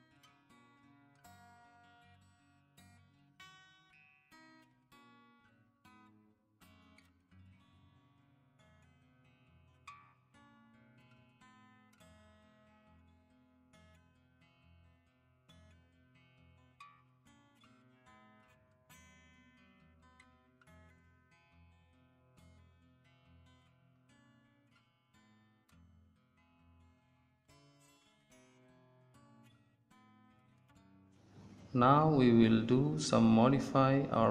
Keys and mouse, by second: 0.2-1.7 middle drag, 2.2 click, 2.5 middle click, 2.7 Tab, 4.8 Tab, 6.5 z, 7.7 ctrl+z, 9.6 a, 9.8 z, 10.5 click, 10.9 right click, 13.1 KP_1, 14.2 g, 16.2 Tab, 18.3 Tab, 19.3 right click, 19.8 right click, 19.9 middle click, 19.9 right click, 20.2 middle click, 21.1 KP_1, 21.8 g, 24.0 middle click, 24.7 KP_1, 25.2 g, 26.1 Tab, 31.9 ctrl+s.